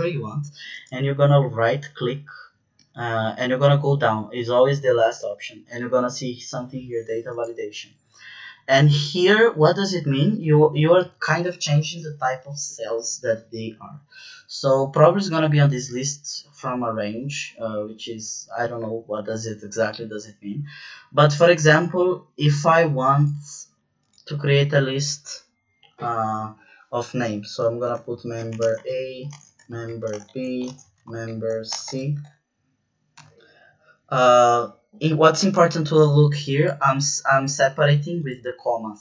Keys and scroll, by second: 27.5-33.1 typing.